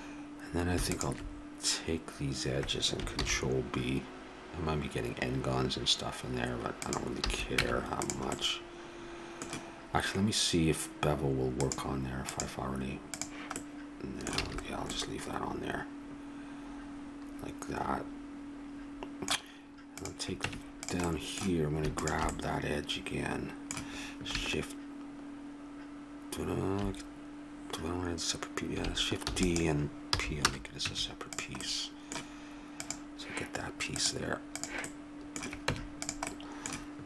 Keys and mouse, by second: 3.1 ctrl+b, 7.2 a, 7.6 Tab, 11.5-14.0 drag, 14.0-16.9 middle drag, 14.3 a, 19.9-21.9 drag, 20.4 Tab, 22.3-24.2 drag, 29.3 shift+d, 30.1 p, 30.8 Tab, 33.3 right click, 34.8 click, 35.6 middle click, 35.9 Tab.